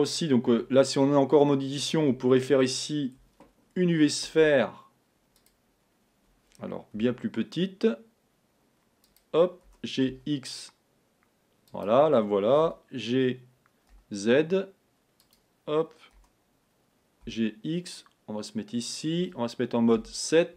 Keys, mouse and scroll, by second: 0.6 Tab, 2.2 a, 4.4 shift+a, 7.1 s, 12.8 g, 16.2 g, 20.1 KP_7.